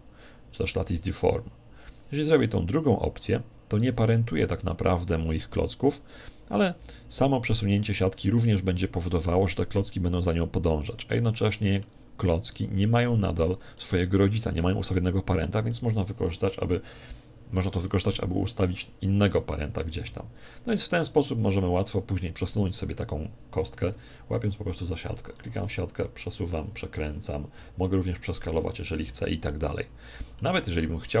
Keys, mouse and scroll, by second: 3.7-6.0 right drag, 8.8 r, 11.2-13.0 middle drag, 12.3 right click, 13.7-17.3 middle drag, 20.5-21.7 scroll up 1, 21.7 right click, 25.4 right click, 29.7-31.2 middle drag.